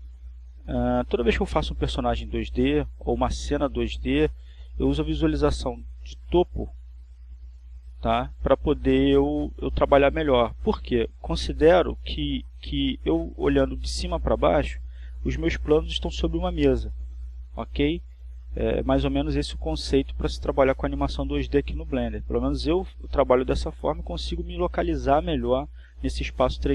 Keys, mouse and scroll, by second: 10.7 click, 11.4 click.